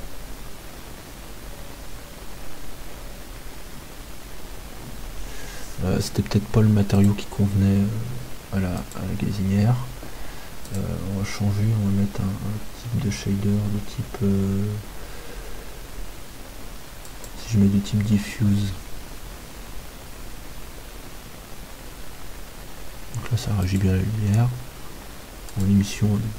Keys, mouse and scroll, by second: 7.6-11.4 right drag, 10.8-12.8 drag, 24.2-26.3 right drag.